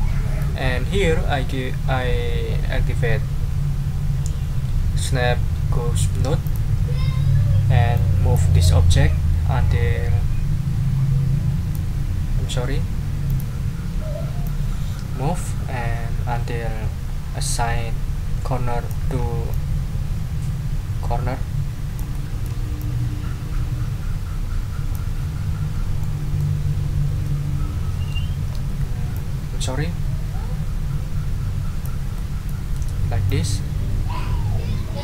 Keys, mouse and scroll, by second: 6.4 click, 7.9 click, 8.6-11.9 drag, 13.3 click, 14.4-19.1 drag, 19.1 ctrl+scroll up 2, 19.5-22.6 ctrl+drag, 22.8-25.1 drag, 25.4 ctrl+scroll down 1, 26.0 ctrl+middle click, 26.8-27.1 ctrl+scroll down 2, 27.2-28.3 ctrl+middle drag, 29.1-32.0 ctrl+drag, 32.1 click, 32.5 ctrl+middle click, 32.8 ctrl+scroll down 2, 33.3-35.0 ctrl+drag.